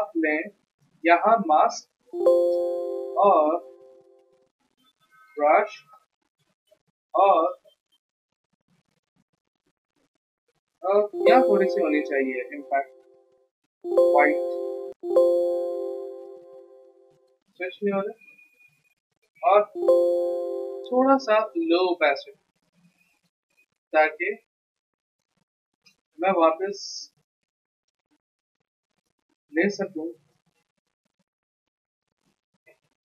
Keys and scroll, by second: 0.0 Escape, 1.9 b, 10.9 x, 13.6 x, 14.8 x, 19.5 ctrl+z, 29.4 x, 31.2-32.7 typing.